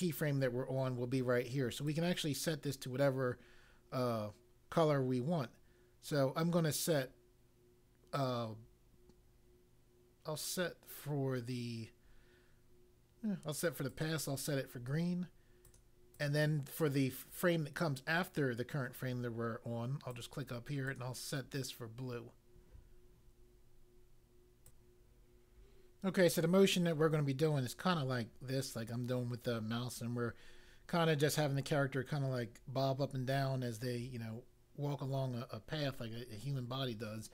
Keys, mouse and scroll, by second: 1.8 click, 13.8 click, 15.7 click, 16.1 click, 16.3 double click, 20.1 click, 20.9 click, 24.6 click.